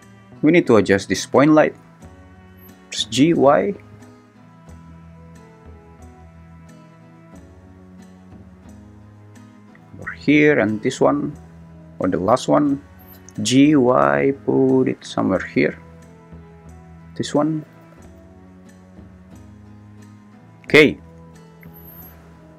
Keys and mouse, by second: 0.9 click, 2.7 g, 3.2 y, 9.4-10.5 drag, 13.1 g, 13.4 y, 17.6 g, 17.8 y.